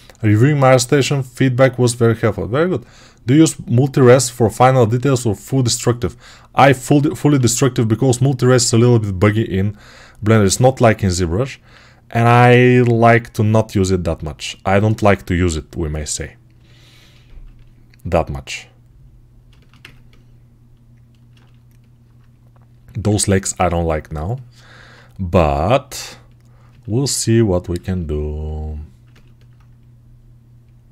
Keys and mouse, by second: 7.2 alt+q, 9.1 g, 19.3-30.9 ctrl+alt+shift+right drag.